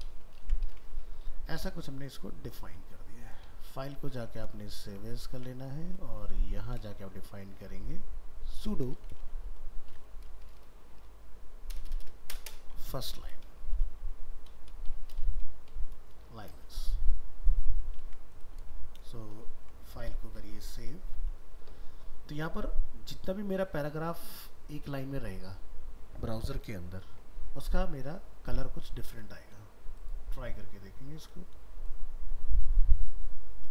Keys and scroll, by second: 0.5 ctrl+s, 3.8 alt+f, 3.9 alt+移, 5.4 ctrl+Tab, 7.1 ctrl+shift+Left, 17.8 ctrl+a, 18.0 ctrl+c, 18.6 ctrl+a, 29.1 ctrl+s.